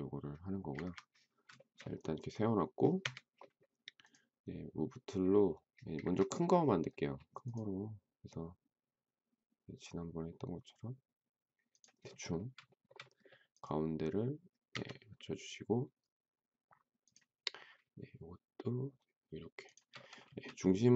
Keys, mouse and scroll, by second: 0.6 Escape, 1.5 shift+middle click, 3.0 Escape, 5.8 Escape, 12.7 shift+middle click, 14.6 Escape, 19.6 shift+click, 20.2 space.